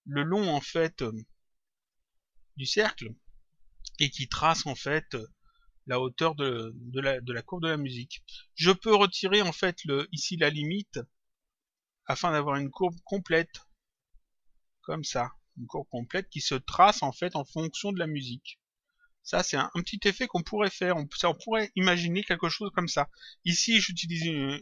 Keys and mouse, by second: 0.9 click, 8.1 click, 9.6 click, 11.0 click, 12.8 click, 18.3 click, 20.1 click.